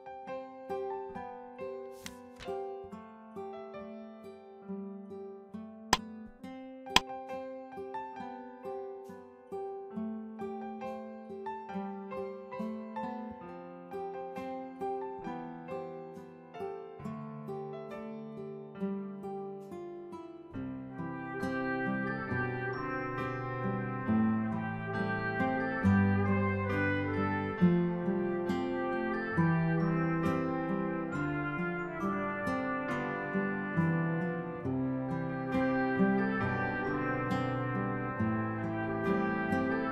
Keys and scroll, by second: 6.5-7.0 typing, 10.4 BackSpace, 11.8 7, 14.9 BackSpace, 16.9 5, 28.3 ctrl+=, 28.9 ctrl+=, 30.6 ctrl+-, 35.6 BackSpace, 37.0 6.